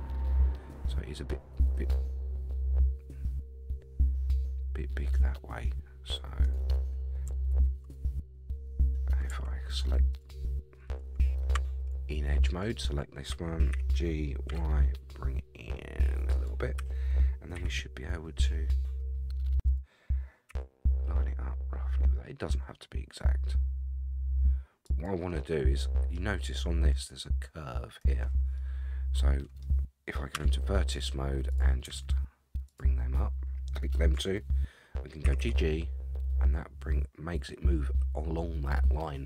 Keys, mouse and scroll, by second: 7.5 ctrl+z, 10.1 alt+click, 11.5 2, 12.6 alt+click, 13.7 g, 16.8 a, 17.5 r, 20.5 g, 25.4 middle click, 28.6-29.6 middle drag, 30.3 1, 31.5 click, 32.7 shift+click, 35.2 g.